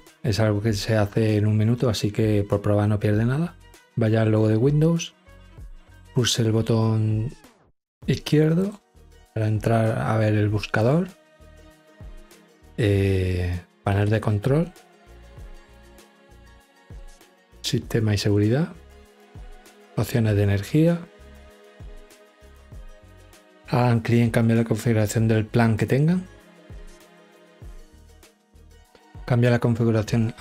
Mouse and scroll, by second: 5.4 right click, 7.6 click, 8.4 click, 10.6 click, 15.5 click, 18.1 click, 21.2 click, 27.1 drag.